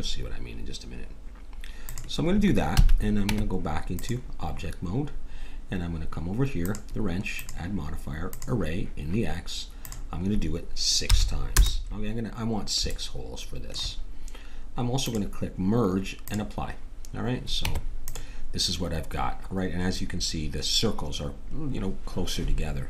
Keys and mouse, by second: 2.7 a, 3.2 Tab, 6.6-9.3 drag, 9.8-11.5 drag, 12.8 middle click, 14.7 middle click, 15.0-18.1 drag, 17.6 Tab.